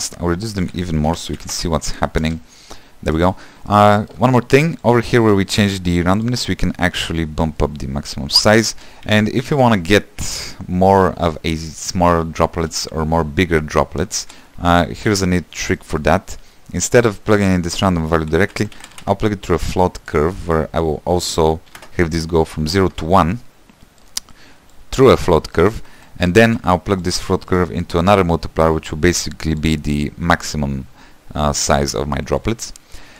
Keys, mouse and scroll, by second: 1.8 click, 2.5 space, 3.5 space, 8.1-9.4 shift+drag, 9.4 =, 9.8 middle click, 10.1 space, 14.4 space, 15.3 =, 20.4 shift+a, 22.1-25.2 drag, 27.3 q, 30.0-33.1 drag.